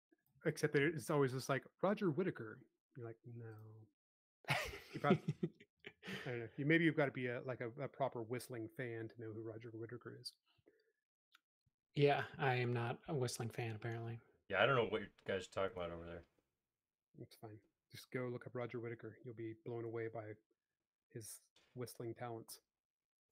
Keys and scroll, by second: 1.2 shift+q, 1.6 e, 4.2-5.0 typing, 9.5 space, 13.6 m, 19.3 s, 23.0 m.